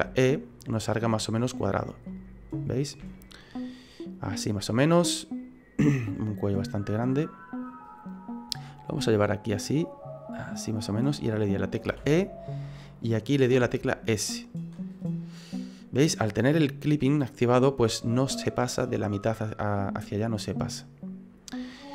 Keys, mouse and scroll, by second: 0.0 e, 2.1 middle click, 3.0 e, 5.0 middle click, 6.1 click, 7.2 middle click, 8.6 click, 11.9 e, 13.6 s, 15.3 middle click, 20.7 middle click.